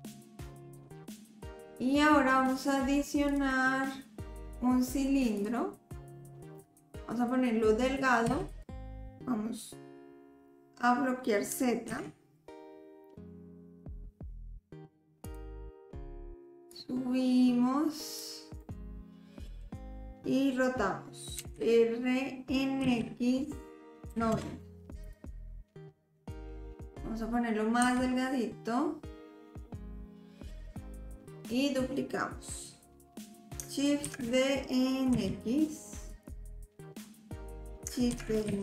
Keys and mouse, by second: 3.4-5.5 drag, 8.3 s, 16.7-18.2 drag, 18.7 middle click, 21.4 r, 26.3 click, 27.9 s, 30.3-31.3 drag, 34.1 shift+d, 38.2 shift+d.